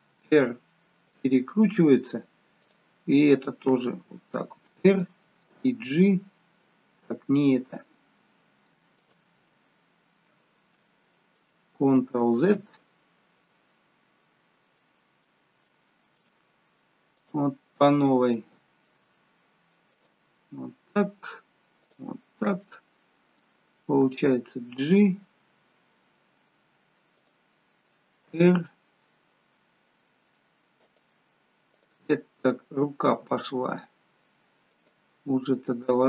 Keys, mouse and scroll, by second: 2.6 click, 3.8 r, 5.5 g, 10.9 shift+middle click, 13.5 ctrl+z, 14.8 middle click, 15.6 shift+middle click, 17.1 click, 17.8-18.1 scroll up 2, 18.3 shift+middle click, 19.9 click, 21.7 shift+click, 22.5 middle click, 24.0 g, 28.3 r, 31.7 click, 33.0 g, 35.4 middle click.